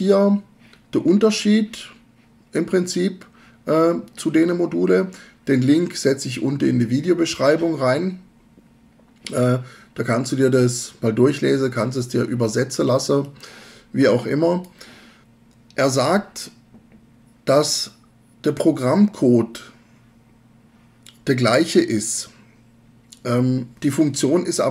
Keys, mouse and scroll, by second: 13.3-14.8 drag.